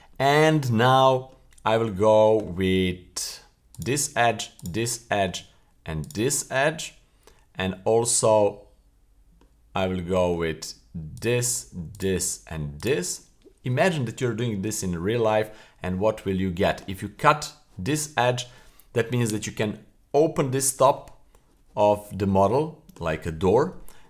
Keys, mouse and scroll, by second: 0.1 middle click, 0.9 middle click, 3.7 right click, 4.6 shift+right click, 4.9-5.3 middle drag, 6.0 shift+right click, 6.4-10.3 middle drag, 11.1 shift+right click, 11.9 shift+right click, 12.8 shift+right click, 13.2-13.9 middle drag, 14.6-16.9 middle drag, 22.7 middle click.